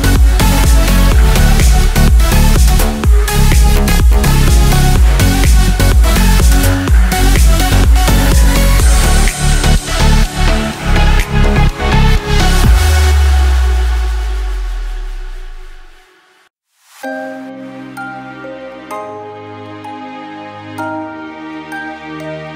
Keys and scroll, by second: 0.3 ctrl+z, 1.0 ctrl+j, 1.3 ctrl+t, 4.6 ctrl+t, 12.0 ctrl+e.